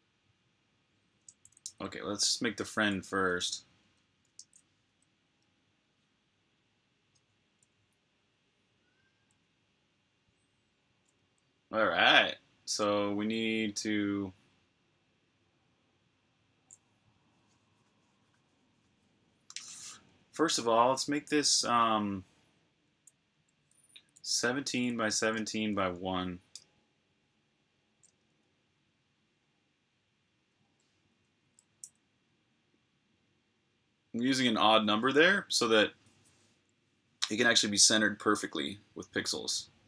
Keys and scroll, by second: 1.5 ctrl+c, 3.0 super+Tab, 4.2 shift+super+Tab, 23.9-25.6 typing, 26.4 Return, 31.6-32.1 typing, 33.2 typing.